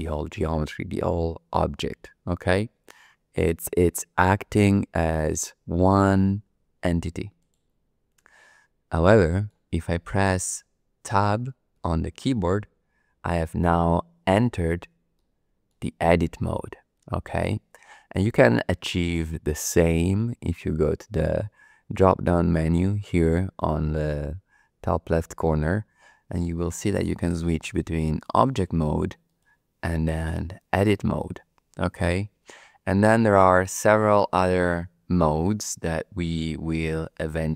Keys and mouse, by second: 7.4-9.0 drag, 9.0 middle click, 9.2 click, 11.8 Tab, 15.1 shift+click, 25.4-28.3 drag, 29.2-30.3 drag, 33.0-37.5 drag.